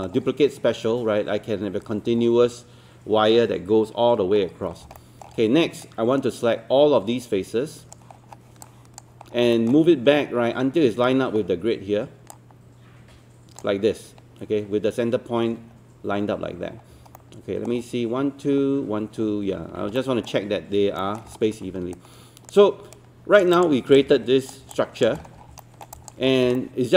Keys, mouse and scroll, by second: 2.0-4.2 scroll down 2, 4.2 scroll up 1, 5.0 alt+middle click, 5.4-5.8 scroll down 1, 8.2-8.6 scroll down 1, 8.6 click, 9.2 scroll up 1, 9.6 alt+middle click, 12.3-13.9 drag, 16.6 scroll up 1, 17.2 alt+middle click, 20.0 alt+middle click, 21.0 alt+middle click, 21.3-21.7 scroll down 1, 21.7 scroll up 1, 22.0 right click, 23.6 click, 24.8 alt+click, 25.2-25.5 scroll down 1, 25.6 alt+middle click, 26.0 alt+click, 26.3 scroll up 1, 26.6 alt+middle click.